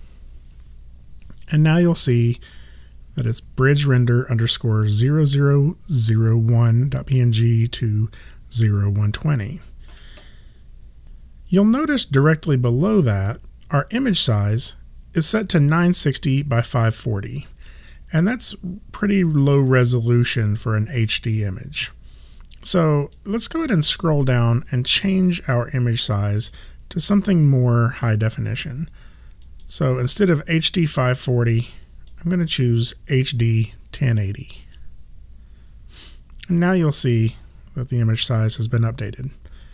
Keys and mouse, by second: 23.1 click, 29.4 click, 34.6 click.